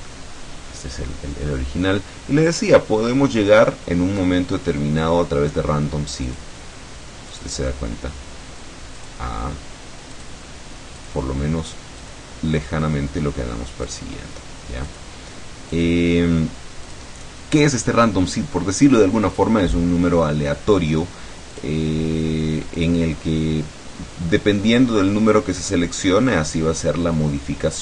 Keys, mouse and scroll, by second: 0.2-1.8 drag, 6.4 click, 7.4 click, 9.0 click, 10.2 click, 11.0 click, 12.0 click, 13.9 click, 14.9 click, 15.8 click, 16.9 click, 21.6 click, 22.8 click.